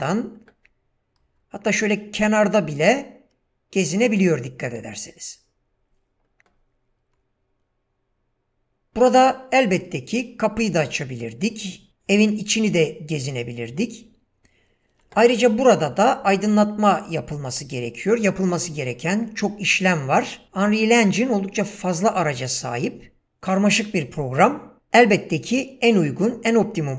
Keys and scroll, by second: 0.6 w, 1.2 space, 2.9 w, 4.8 space, 9.0 w, 13.2 w.